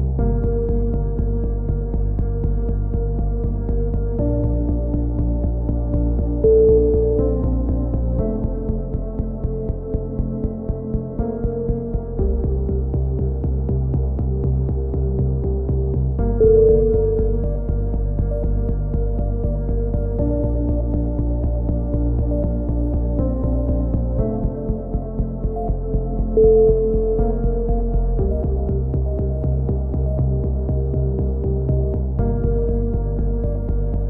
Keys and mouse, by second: 15.7 KP_1, 16.4 e, 17.1-17.8 drag, 17.8 a, 18.5 click, 19.6-21.8 drag, 20.1-21.8 right drag, 21.8 f, 21.8 z, 22.5 right click, 22.6 a, 22.7 z, 23.0-23.5 drag, 23.5 middle click, 28.8 KP_3, 31.9 z, 32.0 Tab, 32.0 z, 32.2 drag, 32.4 middle click, 32.8 drag.